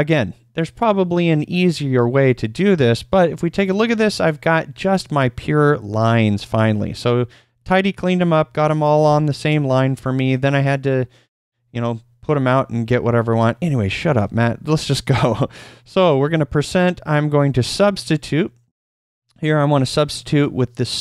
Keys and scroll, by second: 2.0-3.2 typing, 14.2 shift+;, 15.9 typing, 18.4-19.1 typing.